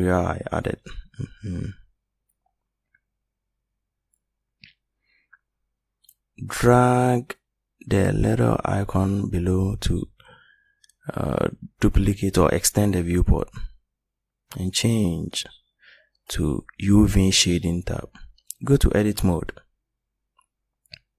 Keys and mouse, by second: 0.3-2.2 middle drag.